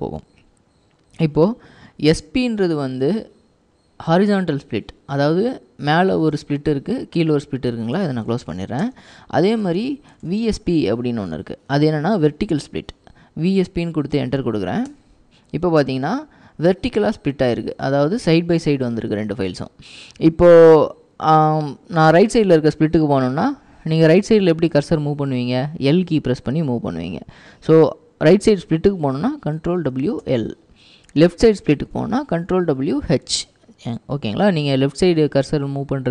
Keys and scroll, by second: 1.7-2.5 typing, 6.3-11.0 typing, 14.9 Return, 24.9 typing, 29.7 ctrl+w, 30.3 l, 32.4 ctrl+w, 33.3 typing, 34.6-35.2 typing.